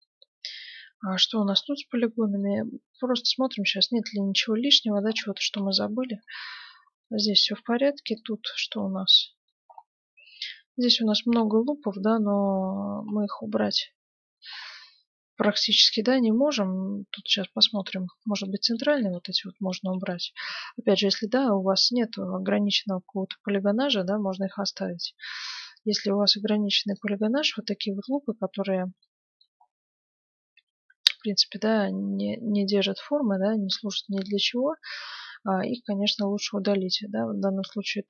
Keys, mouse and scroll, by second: 0.0-4.3 middle drag, 0.0 right click, 1.2-3.0 right drag, 1.9 Tab, 4.9-8.4 middle drag, 7.2 Tab, 8.1-9.7 right drag, 8.7 Tab, 9.2-14.1 middle drag, 9.8 right click, 14.3-19.0 middle drag, 19.0 ctrl+Tab, 19.7 ctrl+Tab, 20.8-22.3 middle drag, 25.4-28.6 right drag, 27.5-30.7 middle drag, 30.9-32.0 middle drag, 33.2-36.4 middle drag, 36.6-38.0 right drag.